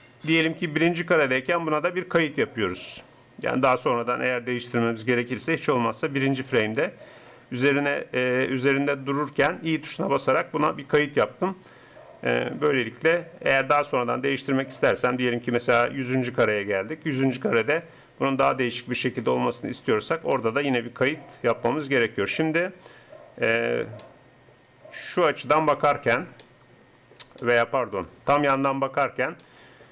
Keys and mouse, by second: 9.3 i, 24.3 middle click, 28.6 KP_3.